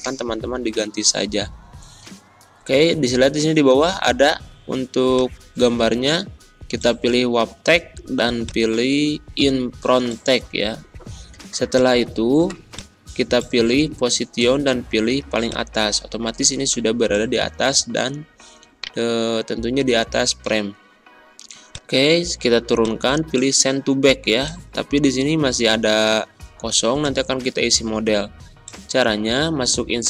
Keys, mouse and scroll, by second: 5.1 click, 8.4 click, 11.7 click, 15.4-18.7 shift+drag, 18.7 right click, 21.6 click, 26.9 click.